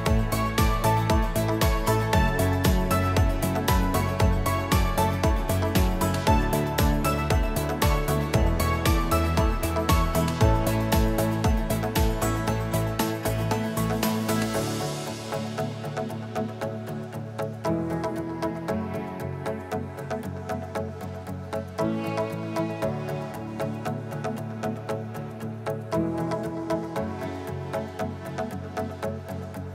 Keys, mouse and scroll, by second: 4.2-6.6 drag, 7.5 F1, 9.1 click, 9.6 click, 11.7 click, 12.5 click, 13.2 click, 16.5 F2, 18.0 click, 19.0 ctrl+shift+c, 20.3 F2, 22.3 click, 24.5 click, 25.1 click, 25.6 click, 26.6 click, 27.3 click, 29.6 click.